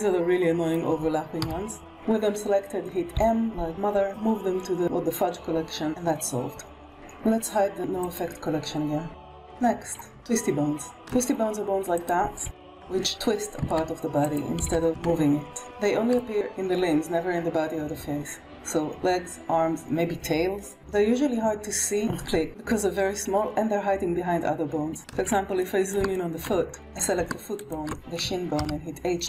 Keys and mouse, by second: 0.4 middle click, 1.3 KP_1, 3.0 m, 5.8 alt+a, 7.9 click, 10.8 shift+middle click, 12.4 r, 14.1 r, 15.5 alt+shift+a, 15.9 shift+middle click, 20.7 KP_1, 25.2 shift+middle click, 25.9 middle drag, 26.2 shift+middle drag, 28.0 shift+click, 28.8 h.